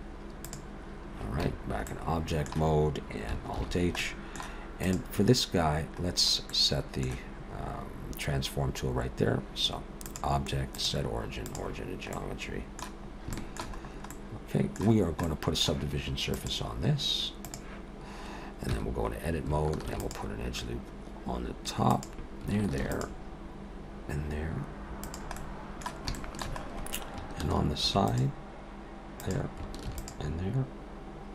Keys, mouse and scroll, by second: 1.4 Tab, 1.9 middle click, 3.6 alt+h, 4.0 middle click, 4.7 click, 6.1-7.0 scroll down 2, 6.5 middle click, 10.1 click, 12.1 middle click, 13.1 scroll up 2, 13.3 shift+middle click, 13.8-14.9 scroll up 2, 14.0 middle click, 14.9 scroll down 1, 15.2 middle click, 16.3 click, 18.7 Tab, 19.9 ctrl+r, 22.7 ctrl+r, 25.4 middle click, 26.2 shift+middle click, 26.6-27.2 scroll up 1, 27.2-27.9 scroll up 2, 27.9 ctrl+r, 29.9 ctrl+r.